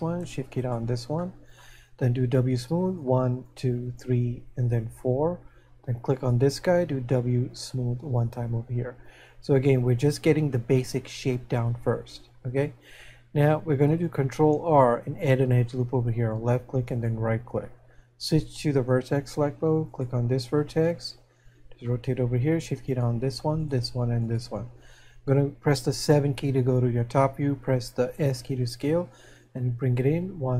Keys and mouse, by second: 0.7 right click, 1.2 shift+middle click, 3.2 w, 3.9 click, 7.6 click, 17.0 right click, 20.8 middle click.